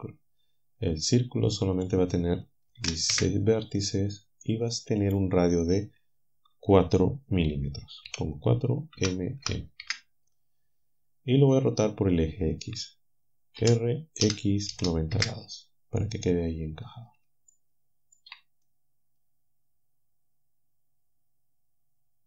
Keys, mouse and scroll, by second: 1.8 click, 2.7 1, 2.8 6, 3.1 Return, 5.0-6.2 drag, 8.1 4, 9.4-9.8 typing, 13.6 typing, 14.7-15.2 typing, 17.5 shift+click, 18.6-22.2 drag.